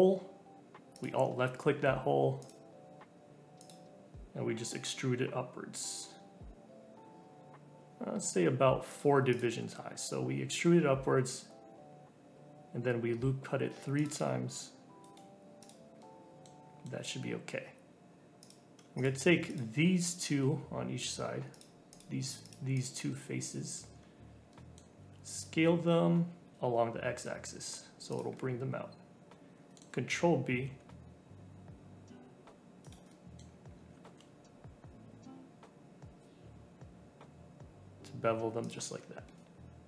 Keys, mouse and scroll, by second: 0.9 alt+click, 2.4 click, 3.5 click, 4.7 e, 9.3 click, 10.5 ctrl+r, 15.6 click, 16.0 middle click, 16.6 scroll down 2, 16.8 middle click, 17.1-18.0 scroll up 1, 18.4 click, 18.9 shift+click, 19.5 shift+click, 20.0 shift+click, 20.4-21.5 middle drag, 21.5 shift+click, 21.9 shift+click, 22.4 shift+click, 22.7 shift+click, 23.1-25.0 middle drag, 25.0 s, 28.3-30.4 middle drag, 30.4 ctrl+b, 33.0 middle click, 33.7 scroll up 1, 34.0 ctrl+b, 38.9 scroll up 2, 39.2-39.8 middle drag.